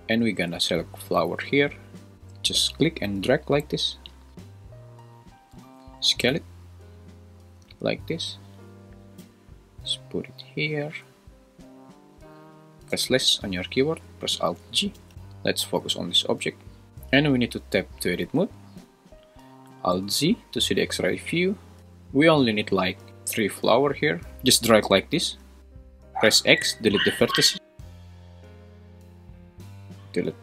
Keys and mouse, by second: 2.4 click, 5.5 s, 7.6 `, 9.2 g, 10.2 click, 12.9 /, 14.9 alt+g, 15.1 `, 17.4 Tab, 18.4 `, 20.0 alt+z, 24.4 click, 24.6 click, 26.4 x, 29.7 click, 30.2 x.